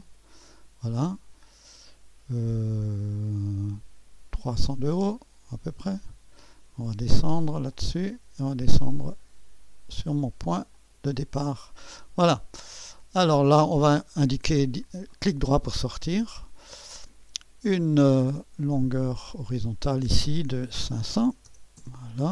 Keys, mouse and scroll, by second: 0.0-1.0 drag, 1.3-3.5 scroll down 2, 5.8 click, 7.7-8.8 drag, 10.7-11.8 drag, 12.2-13.3 scroll up 2, 12.7 middle click, 12.8 click, 13.9 click, 14.5 right click, 14.8 click, 15.1 click, 16.4 click, 18.7 click, 19.4 click, 20.6-21.9 typing.